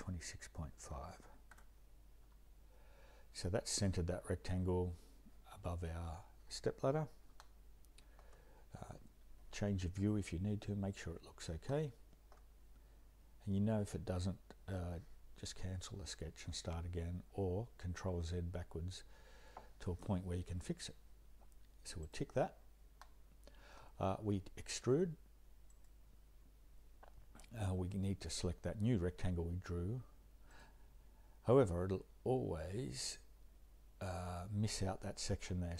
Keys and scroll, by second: 0.5-2.0 typing, 2.2 Return.